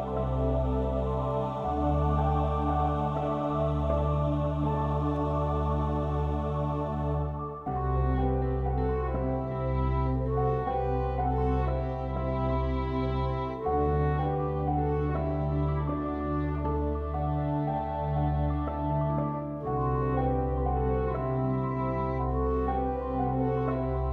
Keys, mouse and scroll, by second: 0.0 ctrl+f, 8.2-9.6 middle drag, 9.6 ctrl+r, 13.9-15.9 middle drag, 16.5-18.8 middle drag, 20.3 a, 21.6 Delete.